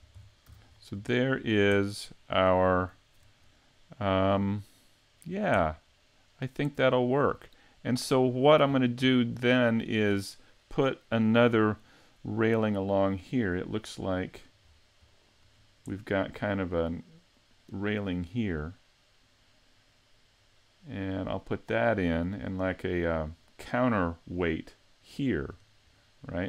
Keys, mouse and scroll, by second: 0.4 a, 1.1 shift+middle click, 1.8 middle click, 2.7 shift+middle click, 3.5 middle click, 4.5 shift+middle click, 5.5 middle click, 8.7 scroll down 3, 9.4-9.9 scroll up 4, 13.5 middle click, 14.6-15.0 scroll down 5, 15.0 middle click, 15.5-16.7 scroll up 2, 15.9 middle click, 17.9 middle click, 20.8 middle click, 25.4-25.9 scroll up 4, 25.9 middle click.